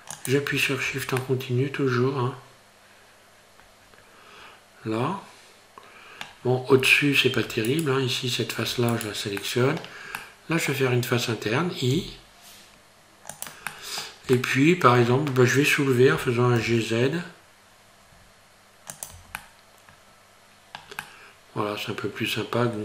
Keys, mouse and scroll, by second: 0.9 Tab, 1.2 middle click, 6.8 Tab, 7.3 Tab, 7.7 right click, 8.7 Tab, 8.9 right click, 9.4 middle click, 10.2 middle click, 12.0 i, 13.7 middle click, 14.4 shift+middle click, 16.1 g, 19.2 Tab, 19.4 middle click, 21.0 middle click, 22.7 scroll down 4.